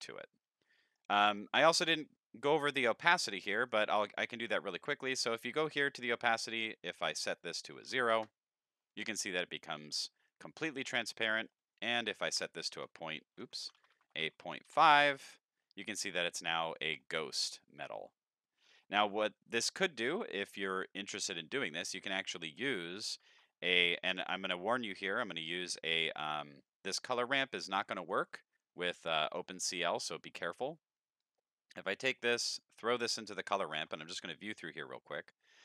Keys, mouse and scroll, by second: 1.0-1.6 middle drag, 1.3 scroll up 3, 1.8-3.0 middle drag, 3.3 middle drag, 4.0 middle click, 6.0 click, 6.8 click, 7.3 click, 9.3-9.8 scroll down 3, 9.8 scroll down 1, 9.9-10.8 middle drag, 11.6 click, 13.9 shift+Left, 16.0 middle click, 17.3-18.6 scroll up 3, 17.6-18.6 middle drag, 19.0 middle click, 19.8 middle click, 20.2 scroll down 5, 20.7-21.9 middle drag, 21.9 click, 22.9 middle click, 23.4 shift+a, 26.9 click, 28.0 click, 29.2 middle click, 31.2-32.6 drag, 32.9 middle click, 33.4 ctrl+shift+middle drag, 33.7 ctrl+shift+click, 33.7-35.6 ctrl+shift+middle drag.